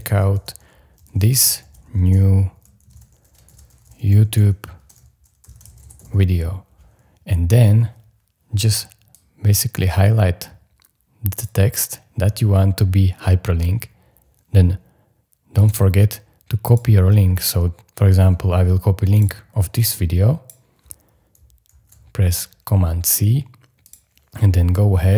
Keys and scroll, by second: 0.0-6.5 typing, 21.6 super+c.